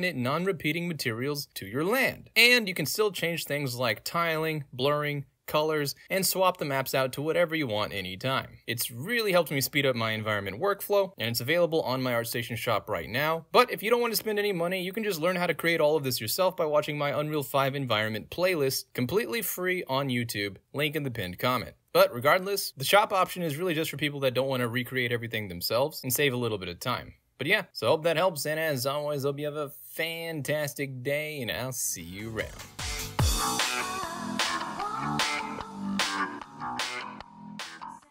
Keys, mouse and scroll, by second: 0.6 right click, 0.7-1.9 drag, 2.0 right click, 2.4-4.9 drag, 4.9 ctrl+z, 5.1 middle click, 5.1 scroll down 2, 5.5 click, 6.1 ctrl+z, 6.2 click, 9.0-11.8 right drag, 12.1 click, 13.1 click, 15.1 middle click, 28.7 middle click, 29.0-38.1 drag.